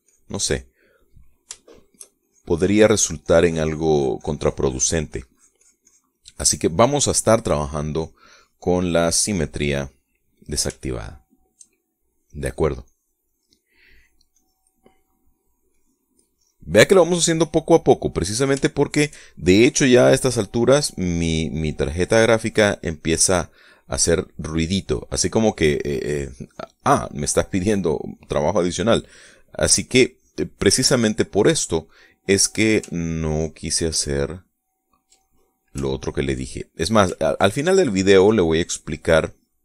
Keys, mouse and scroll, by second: 1.6-2.8 middle drag, 3.0-6.9 shift+drag, 7.0 shift+click, 8.0-9.4 drag, 10.8 click, 11.8-12.8 shift+middle drag, 12.8 click, 14.6 click, 15.1 click, 15.6 middle click, 16.4 click, 17.0 click, 17.7 click, 18.9-19.9 middle drag, 20.0 shift+middle click, 20.6 shift+click, 21.4 click, 22.2 middle click, 23.1 click, 23.8 click, 24.3 middle click, 25.1 middle click, 26.0-29.1 drag, 29.2 middle click, 29.8 click, 30.3 click, 31.4 middle click, 32.3 click, 33.6 ctrl+click, 34.9 ctrl+click, 36.0 ctrl+middle click, 36.6 ctrl+click, 37.3 ctrl+middle click, 38.4 ctrl+middle click, 39.0 ctrl+click.